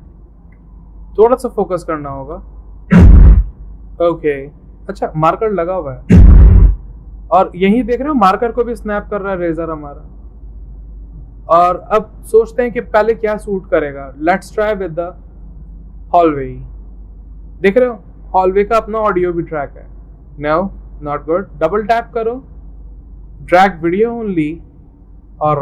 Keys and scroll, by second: 0.0 c, 2.8 c.